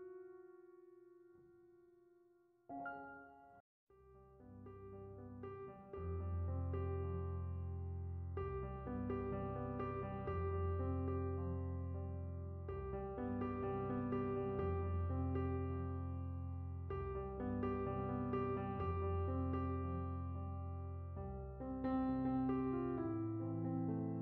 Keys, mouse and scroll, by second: 0.6-1.7 middle drag, 1.7 click, 3.7-4.2 drag, 4.5-5.2 drag, 5.3-6.0 drag, 6.7-7.3 drag, 8.7 click, 10.2 click, 13.0 click, 17.9 click, 19.9 click, 23.1 click, 23.8 click.